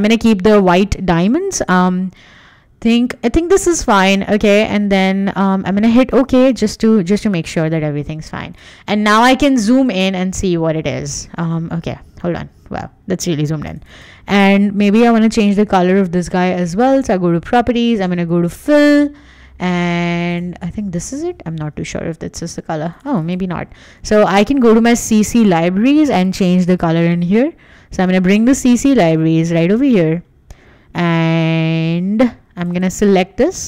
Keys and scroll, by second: 8.1 Escape, 21.5 Escape.